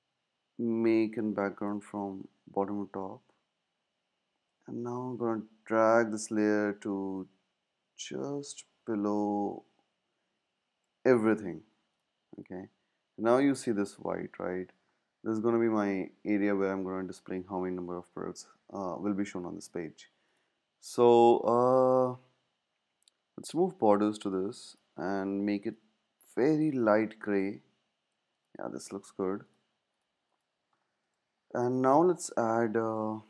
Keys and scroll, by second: 33.1 z.